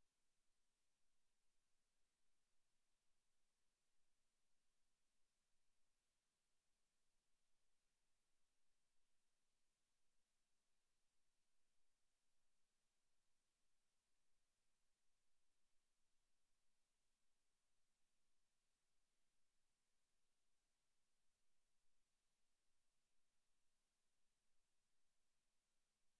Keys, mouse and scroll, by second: 15.3 click, 20.0 KP_7, 22.3 space.